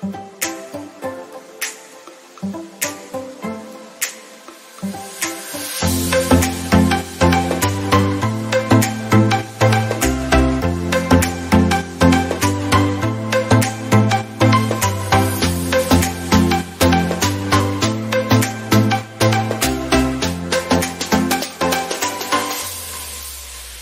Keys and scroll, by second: 13.3 ctrl+alt+z.